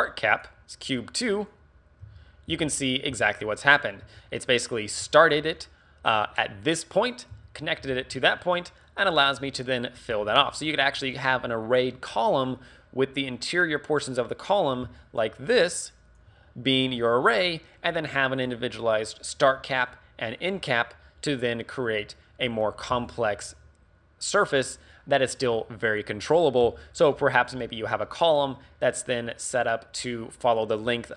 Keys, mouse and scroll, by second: 0.5 click, 1.4 right click, 2.1 h, 2.5 z, 2.8 right click, 3.1 z, 4.1 Tab, 5.1 alt+right click, 7.3 z, 7.8 Tab, 8.1 scroll down 2, 8.4 middle click, 9.4 middle click, 10.1 scroll up 2, 10.5 middle click, 14.9-16.3 typing, 15.0 click, 15.5 click, 16.0 click, 17.6 scroll down 1, 20.4 right click, 23.0 d, 23.1 right click, 25.2 d, 25.3 d.